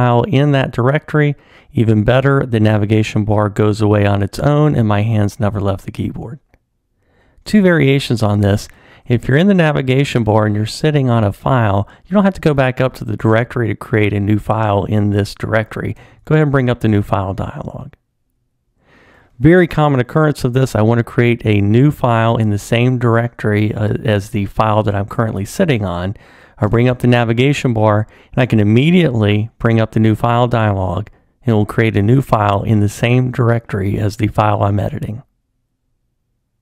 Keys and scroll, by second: 8.4 super+Up, 16.1 super+n, 26.6 super+Up, 28.8 super+n.